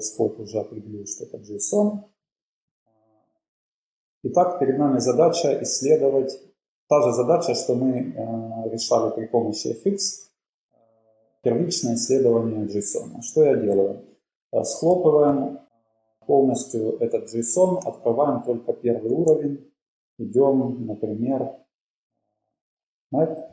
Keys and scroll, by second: 9.3 Up, 9.6 Up, 9.9 Up, 12.1 Up, 12.3 Up, 15.0 super+k, 15.4 super+k, 15.4 super+[, 17.4 super+[, 17.4 alt+super+], 18.9-19.5 Down.